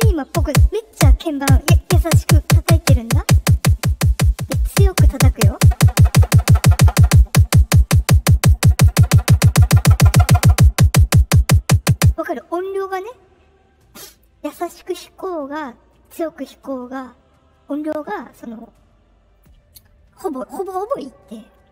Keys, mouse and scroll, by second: 17.8-18.3 drag, 18.5-19.3 drag.